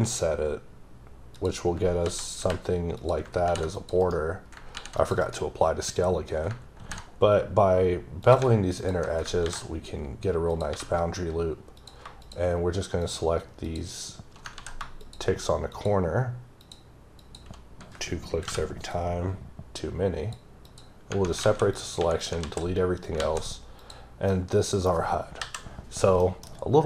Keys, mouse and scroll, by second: 1.4 click, 2.1 s, 3.0 click, 3.5 ctrl+r, 3.8 click, 4.0 right click, 4.7 ctrl+r, 5.0 click, 5.2 right click, 6.8 ctrl+b, 8.2 click, 9.4 ctrl+b, 10.5 click, 10.7 3, 11.8 click, 13.0 shift+double click, 14.6 ctrl+z, 15.0 shift+click, 15.7 shift+double click, 16.6 shift+click, 17.2 shift+click, 18.5 p, 18.9 click, 20.6 click, 21.1 Right, 21.7 click, 22.0 x, 22.4 z, 23.8 click, 24.3 middle click, 24.8 scroll up 2, 25.4 KP_5, 26.0 scroll up 1, 26.2 middle click, 26.4-26.8 scroll down 2.